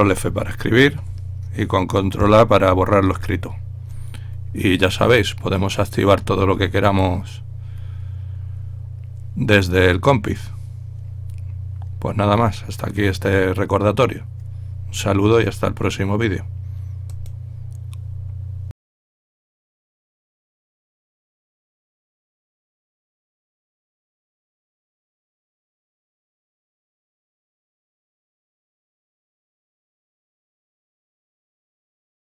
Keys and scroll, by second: 3.0 ctrl+a.